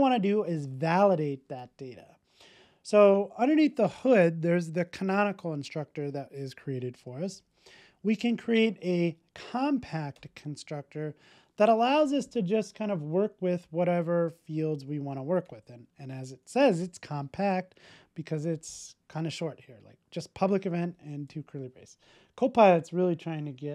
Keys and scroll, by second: 7.4 super+n, 18.3 Tab.